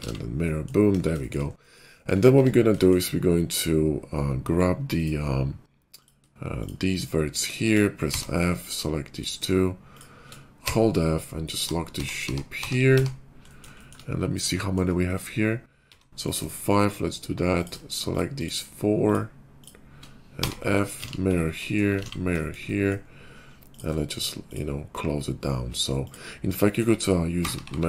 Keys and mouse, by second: 0.8 KP_5, 1.6-4.9 shift+middle drag, 2.3 Tab, 4.9 click, 5.0 middle click, 6.5 shift+click, 6.9 shift+click, 8.1 f, 8.4 click, 9.9 shift+click, 10.6-12.9 typing, 11.3-13.8 middle drag, 15.8 ctrl+r, 17.5 click, 18.3 shift+click, 19.0 shift+click, 20.3 f, 21.0 alt+x, 22.0 alt+x, 22.5-25.9 middle drag, 25.9 click, 26.0-27.8 middle drag, 27.3-27.8 typing.